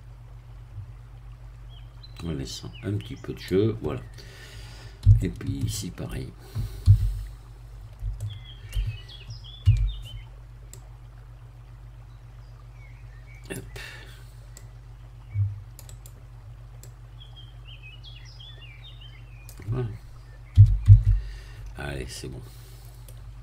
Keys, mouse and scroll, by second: 3.9-5.0 scroll down 1, 5.1-6.3 shift+middle drag, 6.9 a, 7.2-7.6 scroll up 2, 8.1-9.1 shift+middle drag, 9.6 c, 10.7-13.7 drag, 14.6-16.2 drag, 15.9 right click, 16.9-19.6 drag, 20.0 scroll down 1, 20.5 z, 20.9 Tab, 21.2-22.3 scroll down 3, 22.1 middle click, 23.1 scroll down 1.